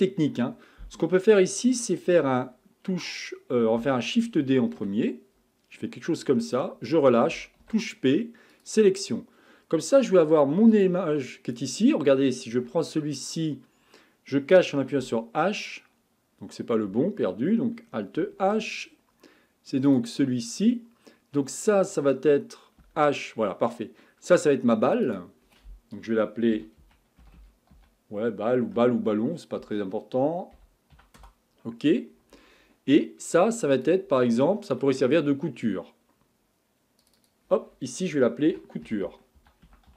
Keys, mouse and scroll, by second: 4.6 shift+d, 7.6 p, 10.7 click, 12.6 Tab, 15.0 h, 16.9 h, 18.4 alt+h, 19.9 click, 22.8 h, 24.9 click, 25.1-27.4 drag, 27.4 l, 33.7 click, 37.0 click, 37.2-39.9 drag.